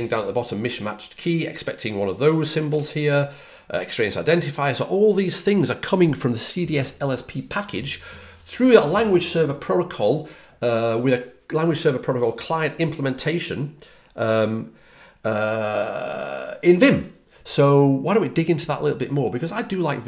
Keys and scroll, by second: 2.6 typing.